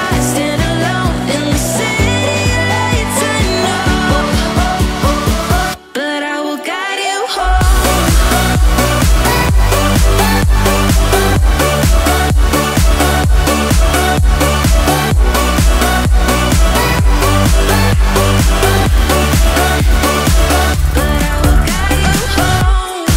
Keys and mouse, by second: 0.0 click, 1.0 e, 1.8 click, 2.6 e, 2.7 click, 3.3 click, 3.3 e, 3.9 click, 3.9 e, 4.2 e, 4.6 click, 5.3 e, 5.4 click, 5.9 click, 5.9 e, 6.5 e, 6.6 click, 7.3 click, 7.8-10.2 typing, 8.0 click, 8.9 click, 9.5 click, 10.1 click, 11.6-13.6 middle drag, 14.0 ctrl+s, 14.6-15.1 middle drag, 15.5 Tab, 15.9 middle click, 17.2 click, 17.5 middle click, 22.7 p.